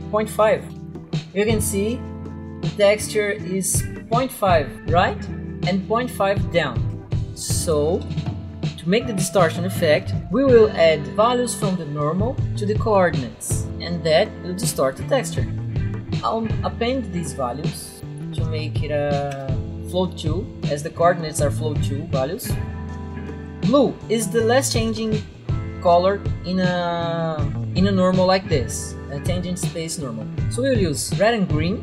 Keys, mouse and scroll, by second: 0.2-1.0 typing, 7.7 click, 8.0 Delete, 12.3 click, 16.4 click, 17.9-19.2 typing, 19.3 Return, 22.8 click, 25.2 click.